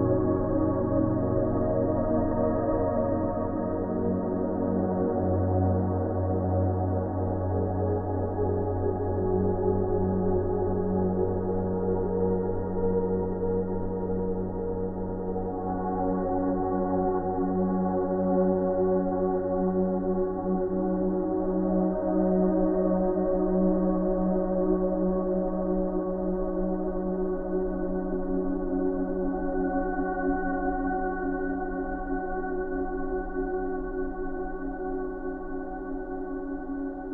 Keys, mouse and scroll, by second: 0.4 alt+click, 1.2 alt+click, 1.9 alt+click, 3.5 alt+click, 4.4 alt+click, 5.1 alt+click, 6.1 alt+click, 7.1 alt+click, 7.4 click, 9.0 ctrl+shift+i, 10.6 alt+click, 15.9 alt+click, 16.1 click, 19.0 alt+click, 19.8 alt+click, 27.2 click, 31.4 alt+click, 34.3 click.